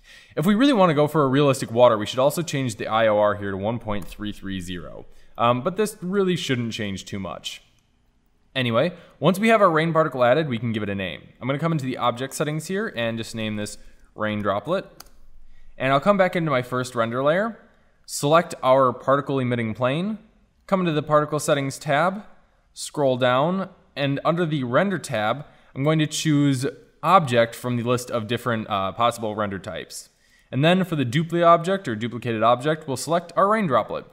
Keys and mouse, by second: 2.3-3.9 drag, 3.9 KP_3, 6.9 shift+z, 11.7-16.0 drag, 16.8-18.6 drag, 18.2-19.4 middle drag, 19.4-21.9 right drag, 21.9 click, 22.5-24.4 middle drag, 24.4-26.3 drag, 26.3-26.9 middle drag, 27.9-29.7 drag, 29.7 middle click, 30.5-32.3 drag, 34.0-34.1 middle drag.